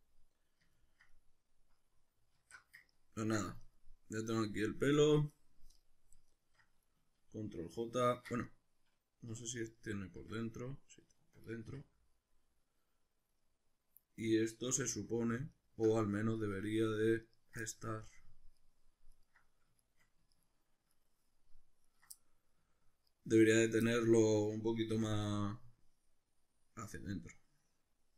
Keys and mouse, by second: 2.4 alt+q, 3.6 right click, 5.1 drag, 6.3 shift+right click, 8.4 right click, 9.2 \, 9.8-15.5 middle drag, 10.2 Tab, 11.7 3, 14.8 3, 15.5 alt+right click, 16.4 right click, 17.3 ctrl+right click, 17.7 middle click, 18.6 ctrl+right click, 19.1 ctrl+right click, 19.8 shift+right click, 20.3 ctrl+right click, 20.9 ctrl+right click, 21.9 ctrl+right click, 22.2 middle click, 23.1 ctrl+right click, 23.3 right click, 23.9-28.1 middle drag, 24.9 c.